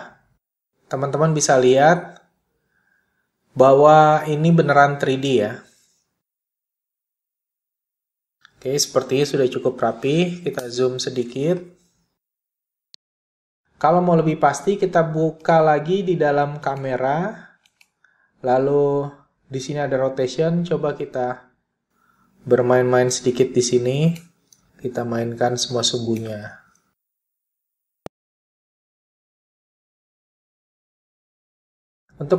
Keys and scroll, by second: 23.2 super+z, 26.0 super+z, 29.0 super+z.